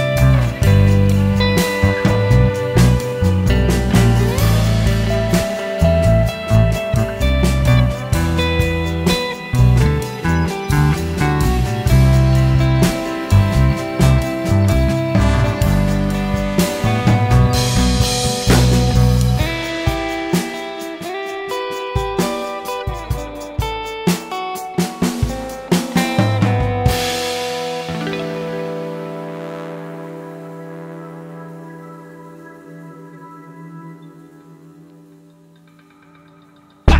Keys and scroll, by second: 24.0 ctrl+KP_Subtract, 24.3 ctrl+KP_Add.